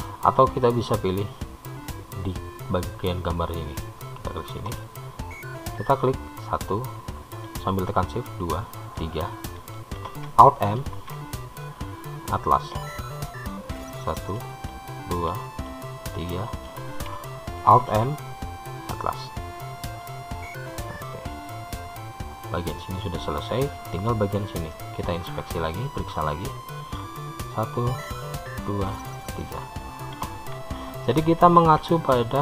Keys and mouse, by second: 4.7 click, 6.1-7.5 drag, 7.6 shift+click, 9.2-10.4 shift+drag, 11.2 alt+m, 15.3 shift+click, 16.5 shift+click, 18.1 alt+m, 25.1-26.8 middle drag, 32.0 alt+m.